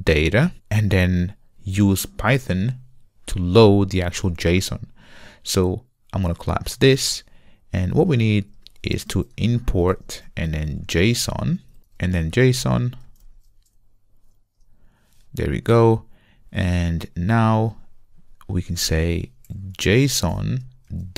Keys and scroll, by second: 11.8 alt+BackSpace, 14.6 Return, 20.5 Return.